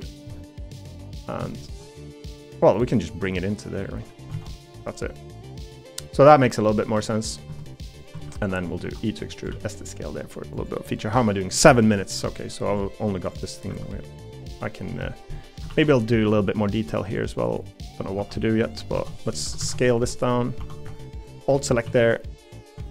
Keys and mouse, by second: 0.3 middle click, 1.5 shift+middle click, 1.9 middle click, 4.3 alt+z, 4.8 middle click, 5.7-6.7 middle drag, 7.1 middle click, 7.5 Tab, 8.1 Tab, 8.4 3, 8.8 e, 9.5 s, 11.8 middle click, 15.7 ctrl+r, 18.2-20.6 typing, 21.8 s.